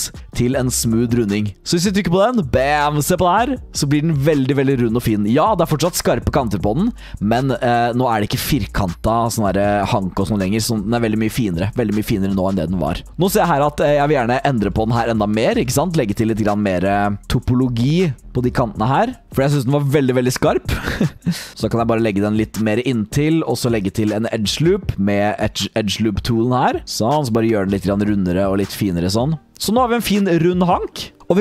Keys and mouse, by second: 0.0 click, 2.3 click, 2.3-5.1 middle drag, 5.7 middle click, 6.9 middle drag, 7.6 middle drag, 8.2 middle drag, 9.1 middle drag, 9.8-10.2 middle drag, 10.8 middle drag, 11.7 middle drag, 13.0 click, 13.9 Tab, 14.8 alt+click, 15.8 alt+click, 16.3 alt+click, 18.3 2, 18.4 click, 19.0 alt+click, 20.9 r, 21.5 g, 23.6 click, 26.8 g, 29.0 r, 29.5 Tab.